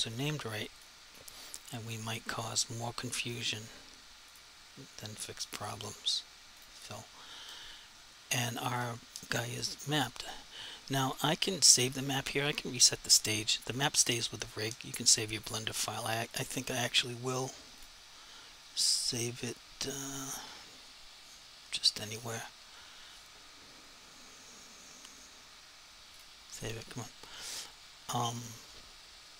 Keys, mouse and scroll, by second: 13.3 click, 16.3 click, 22.0 click, 26.2 click.